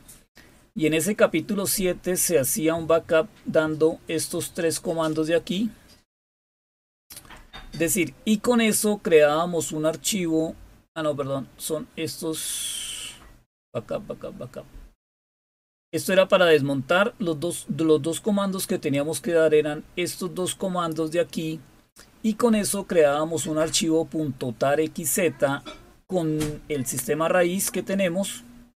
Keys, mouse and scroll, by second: 0.2 scroll down 1, 0.8-2.7 scroll down 3, 5.0-6.8 drag, 7.1 click, 10.8-11.1 scroll down 3, 11.6 scroll down 2, 12.3 scroll down 2, 13.0-13.3 scroll down 3, 13.6-15.0 scroll up 3, 15.0-15.9 scroll up 1, 16.6-17.6 scroll down 1, 18.8-21.1 drag, 28.0 scroll down 1.